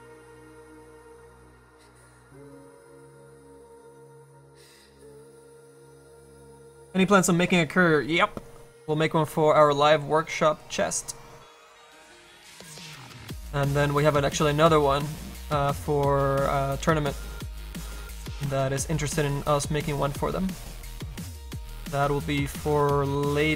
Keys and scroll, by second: 18.1 ctrl+z.